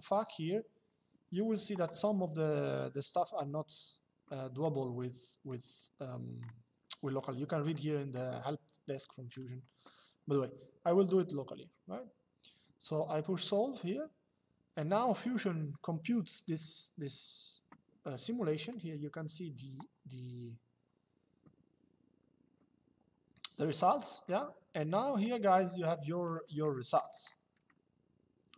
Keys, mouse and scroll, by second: 9.0 click, 13.5 click, 18.3 click, 25.4 shift+middle click, 27.4 shift+middle click.